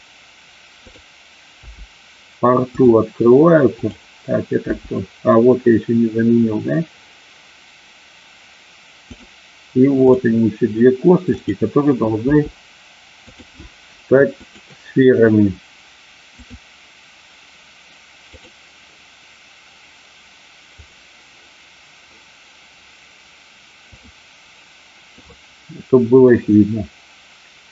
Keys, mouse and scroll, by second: 0.7 click, 1.6 g, 2.7 click, 3.9 click, 9.1 click, 11.3 click, 12.2 g, 13.2 click, 14.3 click, 16.3-18.4 drag, 24.0 click, 26.2-27.7 middle drag.